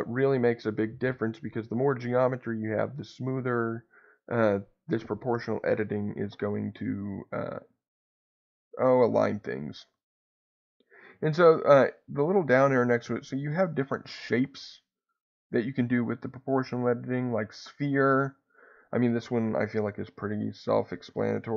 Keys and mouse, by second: 9.9-18.5 drag.